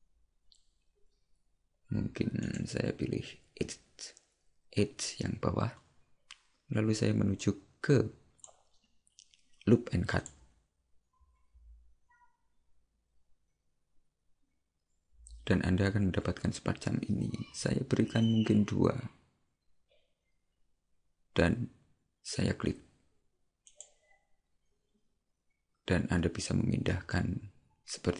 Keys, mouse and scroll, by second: 2.5 right click, 7.4 click.